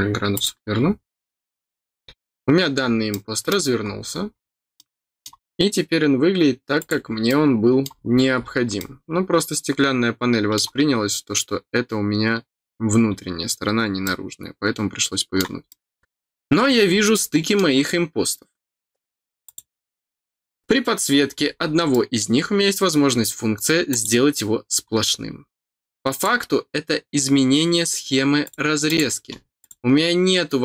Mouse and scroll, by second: 0.3 click, 3.1 middle click, 3.8-4.2 scroll up 2, 4.7 middle click, 6.7 click, 7.2 middle click, 7.8-8.4 scroll down 2, 8.7-10.5 middle drag, 11.2 scroll up 1, 14.0-15.3 middle drag, 15.6 middle click, 15.9-16.9 scroll up 4, 17.1 middle click, 19.4 click, 21.3-21.6 scroll down 4, 21.9 middle click, 23.8 click, 24.9 middle click, 26.1 click, 28.4 click, 28.8 click, 29.6 click.